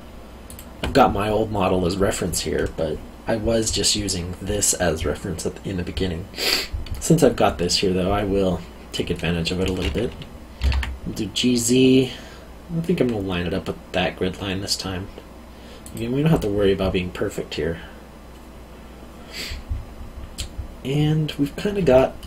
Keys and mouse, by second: 0.4 alt+click, 10.6 g, 10.7 z, 15.8 click, 21.9 alt+middle click.